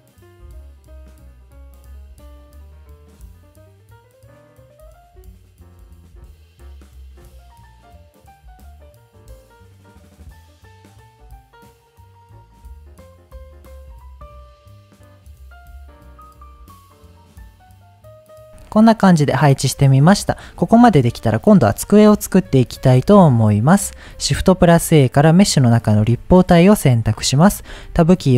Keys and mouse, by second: 0.2 middle click, 1.0-5.4 typing, 1.3 click, 1.5 click, 2.2 click, 2.7 click, 3.4 click, 3.7 click, 4.4 click, 5.0 click, 6.4 click, 6.6 KP_1, 7.0 click, 7.1 g, 7.3 click, 7.5 g, 7.8 click, 8.0 shift+middle click, 8.5 click, 8.7 middle click, 9.2 ctrl+KP_1, 9.7 g, 10.3 click, 10.5 g, 11.1 click, 11.9 middle click, 12.3 ctrl+s, 12.8 Tab, 12.9 ctrl+s, 13.4-16.2 typing, 13.8 click, 14.9 click, 15.1 drag, 15.8 click, 16.5 middle click, 16.9 middle click, 17.1 click, 17.3 ctrl+s, 17.4 middle click, 17.9 middle click, 19.0 middle click, 24.2 shift+a, 27.7 Tab.